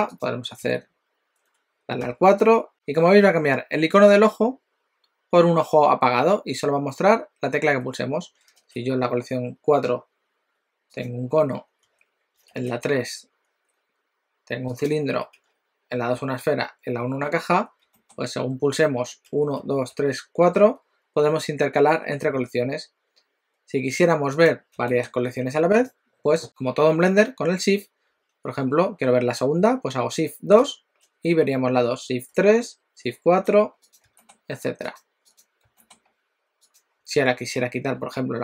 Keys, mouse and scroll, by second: 0.2 click, 0.6 c, 2.0 4, 8.5 shift+a, 11.8 3, 12.5 shift+a, 15.4 2, 16.1 1, 17.2-17.8 scroll down 3, 18.0 shift+middle click, 19.2 2, 19.6 3, 20.0 4, 22.2 1, 24.4 click, 24.8 g, 30.6 shift+2, 32.4 shift+3, 32.9 shift+4, 34.0 click, 34.2 g, 35.4 click, 35.7 g.